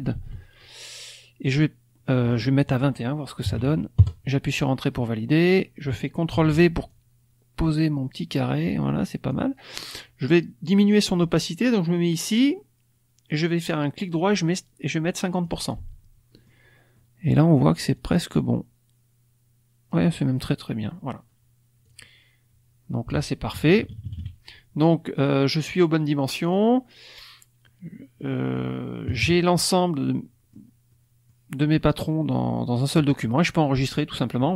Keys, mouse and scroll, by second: 0.1 ctrl+z, 2.5 click, 3.4 KP_2, 3.9 KP_Enter, 4.9 middle click, 4.9-5.9 scroll up 2, 6.3 ctrl+v, 6.8-9.5 ctrl+drag, 13.2 right click, 15.4 click, 16.3 middle click, 16.3 scroll up 1, 16.9 middle click, 17.9-20.1 drag, 21.8 click, 23.0 Delete, 23.5 KP_Subtract, 24.0 KP_Subtract, 24.8 middle click, 25.4-26.3 scroll up 1, 26.4 click, 26.6-27.6 scroll up 1, 27.6-28.7 middle drag, 28.7-29.0 scroll up 1, 29.0 KP_Subtract, 29.9 click, 30.8 click, 32.0 click.